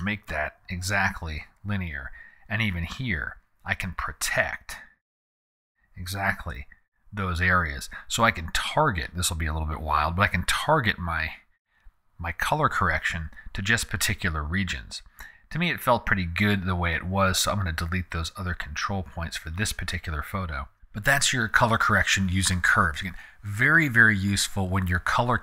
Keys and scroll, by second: 0.0-0.5 typing, 6.0 4, 6.5 Home, 13.0 super+z.